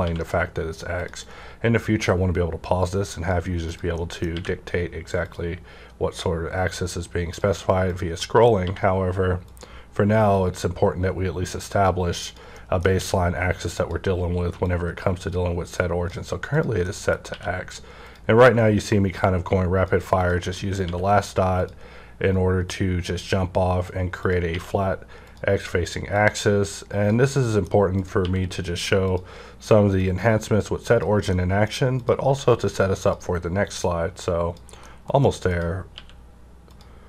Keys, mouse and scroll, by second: 0.0-0.9 scroll down 1, 0.0 q, 0.9 click, 1.8-3.9 drag, 4.1 middle click, 4.1 click, 4.2 scroll up 1, 4.3 q, 5.1 click, 6.1-8.1 drag, 8.1 middle click, 8.6 q, 9.4 click, 10.3-12.5 drag, 12.5 middle click, 12.9 q, 13.7 click, 13.8 click, 14.6-16.8 drag, 16.8 middle click, 17.2 q, 18.0 click, 18.9-20.5 drag, 20.5 middle click, 20.8 q, 21.6 click, 22.7-24.5 drag, 24.5 q, 25.2 click, 26.1-27.9 drag, 27.3 middle click, 28.2 q, 29.0 click, 30.0-32.0 drag, 31.3 middle click, 32.2 q, 32.9 click, 33.8-35.5 drag, 34.8 middle click, 35.8 q, 36.6 click.